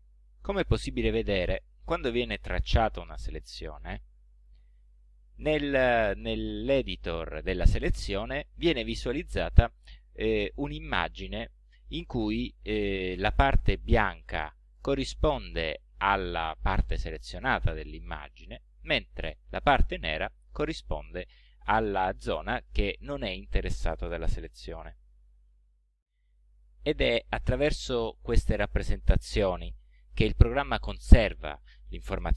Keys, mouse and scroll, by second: 2.8 click, 4.8 click, 5.6-6.7 drag, 20.0-22.2 drag.